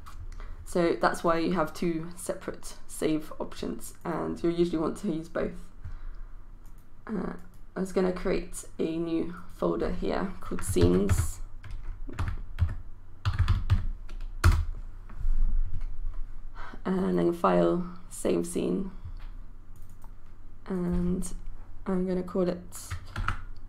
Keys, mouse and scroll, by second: 7.4-8.5 right drag, 9.3-10.5 drag, 10.8-14.2 typing, 14.4 Return, 17.0 click, 23.2-23.6 typing.